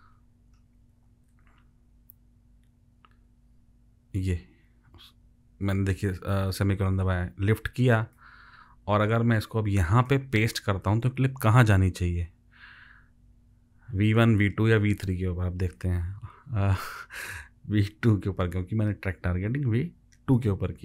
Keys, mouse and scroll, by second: 1.3 shift+;, 3.7 ;, 16.8 ctrl+v.